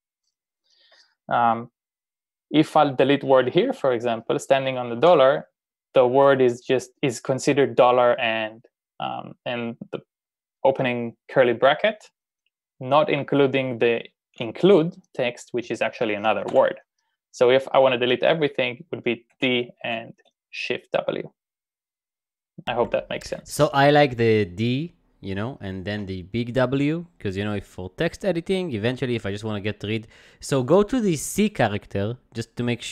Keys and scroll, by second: 5.0 d, 6.9-7.6 typing, 16.7 u, 19.1-20.3 typing, 26.0 u.